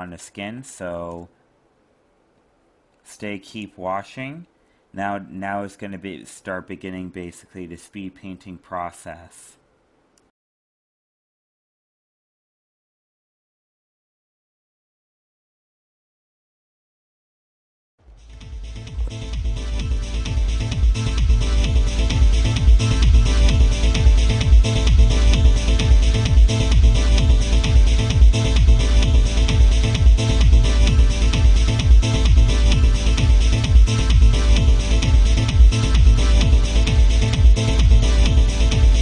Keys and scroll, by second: 23.2 ctrl+z, 27.9 ctrl+z, 29.2 ctrl+z, 33.1 ctrl+z, 33.6 ctrl+alt+z.